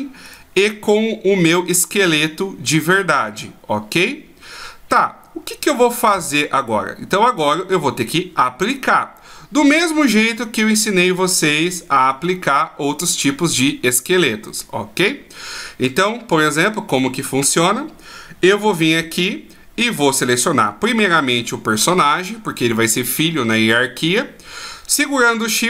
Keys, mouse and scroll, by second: 0.3 right click, 9.7 right click, 16.3 right click, 16.9 right click.